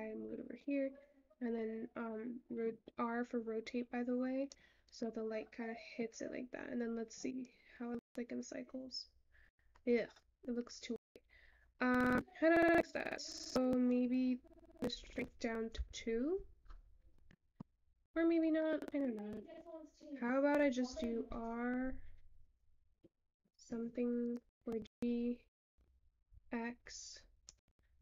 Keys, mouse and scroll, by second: 15.9 click.